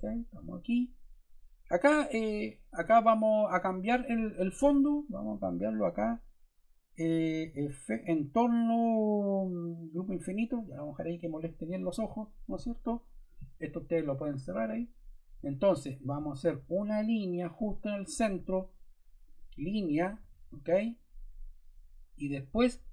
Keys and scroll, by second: 20.1 Escape.